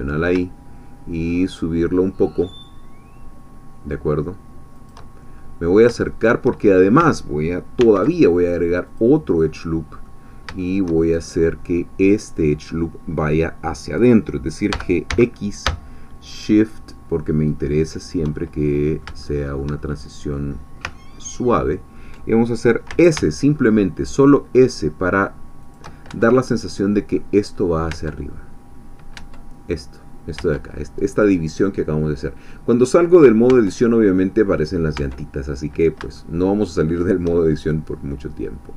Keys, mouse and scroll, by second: 4.7 shift+click, 5.4 shift+scroll up 1, 5.6-6.1 scroll down 1, 6.1 shift+middle click, 7.8 ctrl+r, 8.4 ctrl+click, 9.4 ctrl+scroll up 1, 9.5 middle click, 10.2 scroll down 3, 10.6-11.9 shift+drag, 14.7 g, 15.1 x, 18.0 shift+click, 18.7 middle click, 19.7 shift+middle click, 20.9-22.6 ctrl+middle drag, 22.9 s, 25.6 shift+click, 26.1 shift+Tab, 26.5 shift+middle click, 27.9 Tab, 28.8 scroll down 2, 29.1 Tab, 35.1 Tab, 35.6-35.9 scroll up 1, 35.9 shift+middle click, 36.2-37.3 shift+middle drag, 38.3 scroll down 1, 38.5-38.7 middle drag.